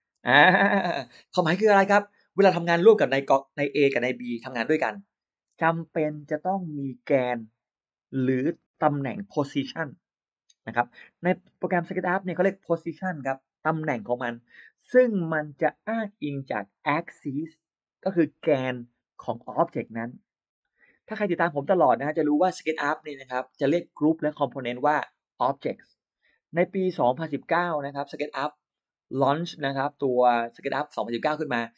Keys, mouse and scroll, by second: 0.0 space.